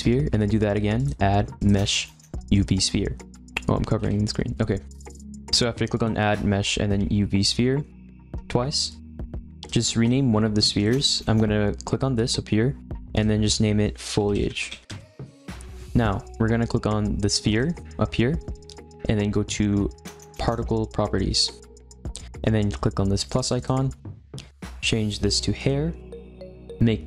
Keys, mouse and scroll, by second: 0.9-3.2 drag, 4.0 -, 5.9-9.0 drag, 10.7 click, 10.9 click, 13.1-16.1 drag, 17.5 click, 20.4 click, 23.5-25.6 drag.